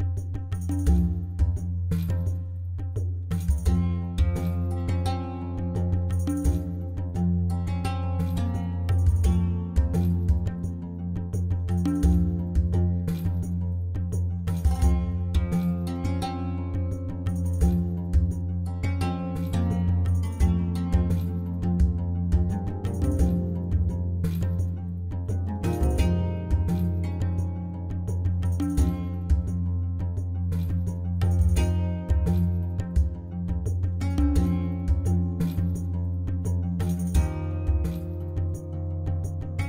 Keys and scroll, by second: 14.8 Tab, 23.9 2, 25.4 ctrl+b, 28.4 i, 33.4 i, 35.3 Tab, 36.3 alt+a.